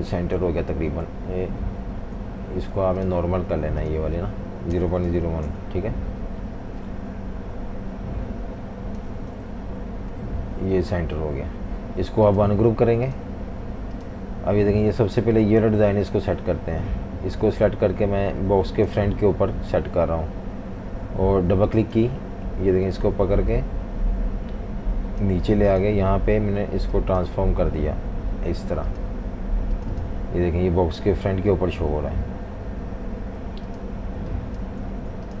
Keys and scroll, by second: 0.4 Left, 0.6 Left, 0.8 Left, 1.3 Right, 2.0 Right, 4.5-6.0 typing, 9.5 Right, 10.1 Right, 10.3 Right, 10.4 Right, 10.6 Right, 16.1 super+z, 34.9 super+z.